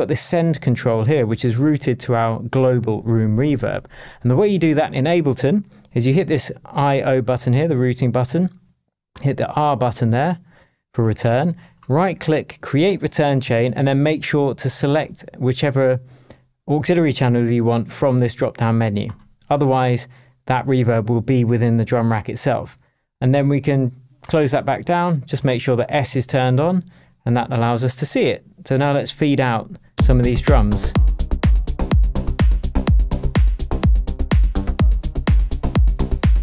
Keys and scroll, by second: 29.9 space.